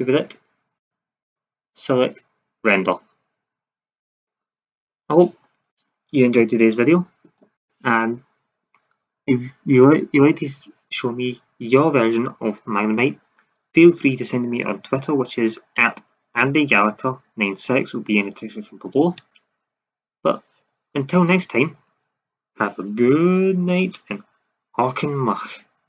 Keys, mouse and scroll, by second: 0.7-2.4 drag.